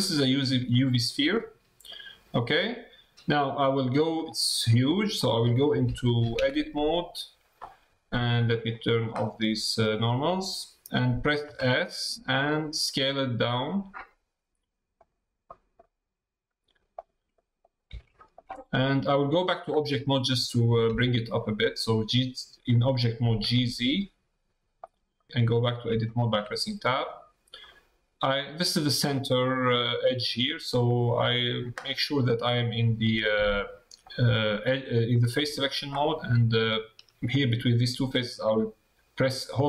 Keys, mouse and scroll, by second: 0.7 middle click, 1.9 middle click, 6.3 Tab, 8.4-10.2 drag, 15.4 middle click, 16.6 s, 17.3 middle click, 17.9 middle click, 18.9 middle click, 19.8 Tab, 25.1 middle click, 25.5 Tab, 26.0 middle click, 27.7 middle click.